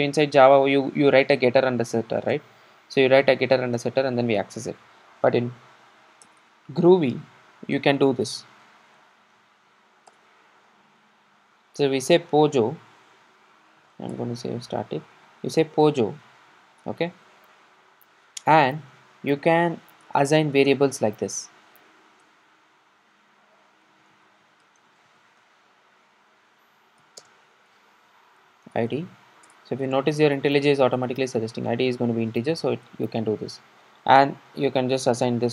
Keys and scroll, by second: 10.2 Return, 29.5 Return.